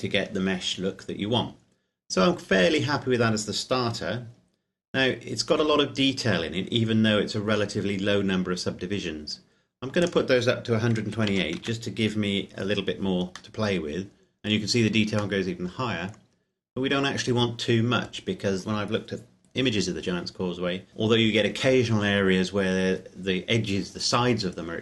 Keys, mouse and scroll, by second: 2.2-4.1 scroll up 1, 4.2-5.6 scroll down 1, 5.6-6.2 scroll up 1, 6.2-8.0 scroll down 1, 10.1 click, 11.0 KP_1, 11.1 KP_2, 11.4 KP_8, 11.6 KP_Enter, 13.5 middle click.